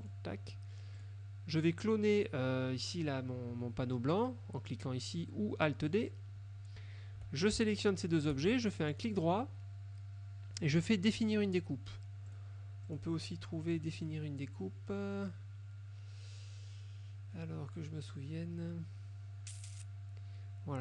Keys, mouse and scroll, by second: 0.2 click, 1.1 click, 6.0 click, 8.1 shift+click, 12.4 click, 13.0 click.